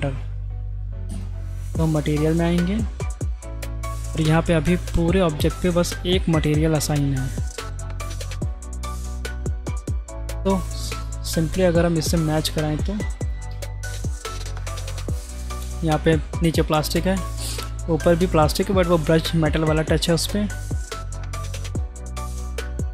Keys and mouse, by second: 2.2 middle click, 4.1 middle click, 4.9 click, 8.1 click, 8.6 ctrl+z, 9.2 ctrl+z, 9.8 click, 11.7 click, 15.8 click, 17.0-17.4 drag, 20.0-20.6 drag, 21.2 click, 22.2 click.